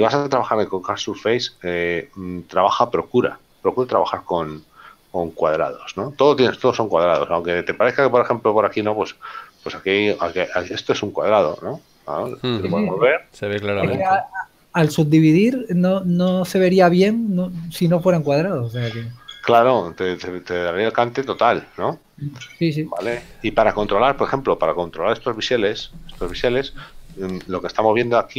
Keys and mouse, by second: 10.3 click, 10.9 right click, 26.6 Tab.